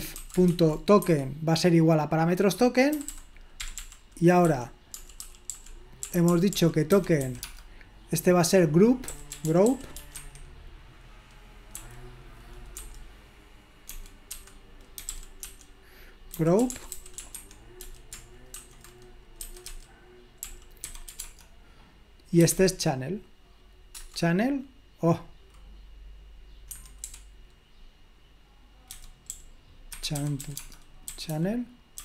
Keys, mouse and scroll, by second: 0.0-0.8 typing, 1.0 Escape, 2.9-7.5 typing, 8.9-10.5 typing, 11.8 typing, 12.8 typing, 13.9-19.8 typing, 20.9-23.0 typing, 24.0 Return, 26.7 Escape, 27.0 u, 29.0-32.0 typing.